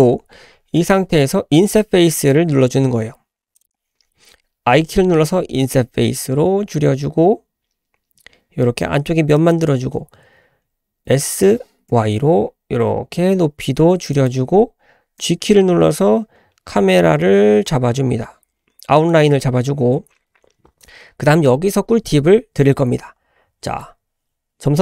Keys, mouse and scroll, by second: 3.6 click, 15.2 g, 17.1 typing, 20.0-22.0 scroll up 1, 22.0-23.1 scroll up 1.